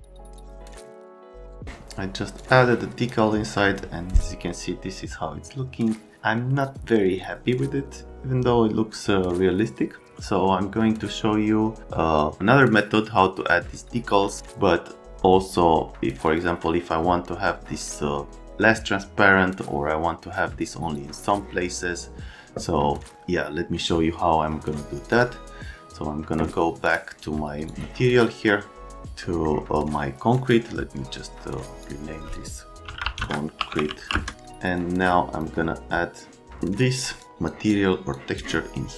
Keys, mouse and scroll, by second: 0.2 scroll down 1, 0.4 click, 16.2 middle click, 25.1 middle click, 26.8 middle click, 27.7 middle click, 27.9 click, 29.2 right click, 30.3 scroll down 1, 31.8 click, 33.0-34.5 typing, 34.7 click, 36.8 click, 37.2 click, 37.4 click, 38.1 click.